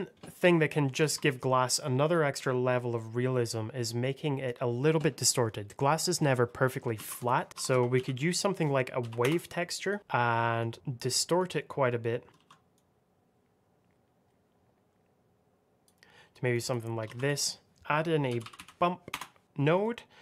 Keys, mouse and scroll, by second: 0.3 middle click, 1.2 shift+middle click, 1.9 click, 3.2 middle click, 5.6 middle click, 6.9 shift+a, 7.1 click, 7.5 w, 7.6 a, 7.8 v, 8.9 Down, 9.1 Return, 9.7 click, 10.0 ctrl+shift+click, 10.5 click, 12.3 ctrl+z, 12.6 click, 16.4 click, 17.0 shift+a, 17.1 click, 18.2 b, 18.3 u, 18.5 m, 19.0 Return, 19.4 click.